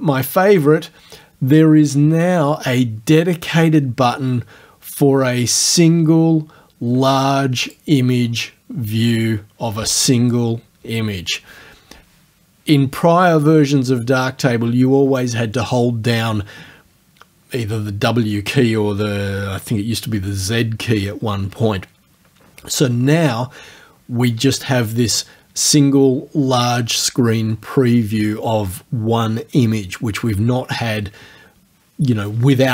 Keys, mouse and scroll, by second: 7.7 click, 9.1 click.